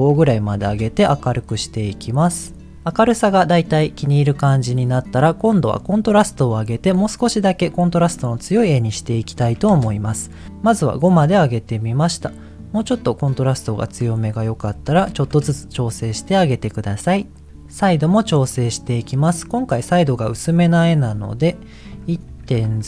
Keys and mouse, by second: 4.7 middle click, 5.6 middle click, 6.8-9.8 drag, 11.6 middle click, 12.9 middle click, 14.0-15.4 drag, 19.0-20.2 middle drag, 21.0-22.8 drag.